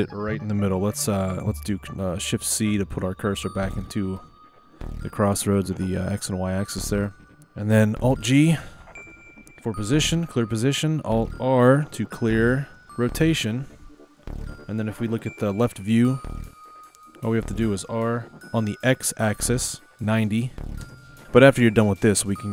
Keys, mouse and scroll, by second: 2.6 shift+c, 3.8-6.8 shift+middle drag, 7.0-8.9 shift+middle drag, 9.1 alt+g, 12.8 alt+r, 14.4 KP_3, 17.9 r, 22.3-22.5 middle drag.